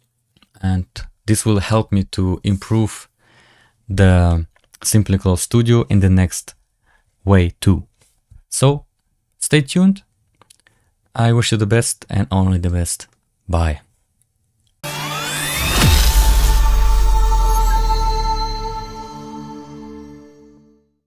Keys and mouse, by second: 4.2 middle click.